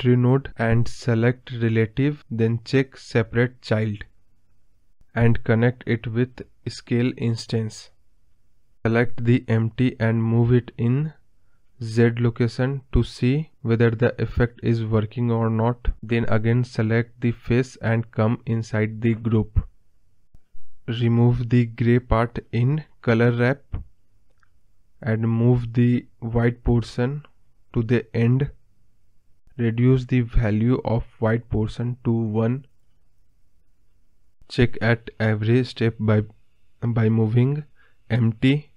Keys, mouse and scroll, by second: 1.2 click, 1.8-5.7 drag, 5.7 scroll up 4, 6.0-7.1 middle drag, 7.1-10.8 scroll down 2, 10.8 click, 12.3 g, 14.7 ctrl+z, 15.8 Left, 22.9-30.6 drag, 32.6 scroll up 2, 32.8-34.3 middle drag, 35.6 scroll down 1, 35.8 scroll up 2, 35.9-38.1 middle drag, 38.5 click.